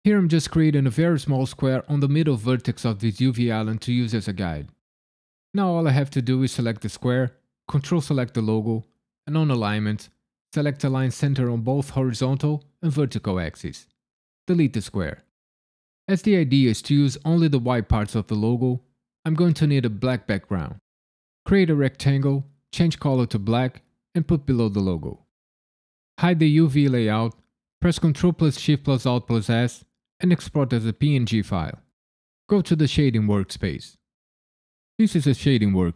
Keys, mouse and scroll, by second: 35.1 right click.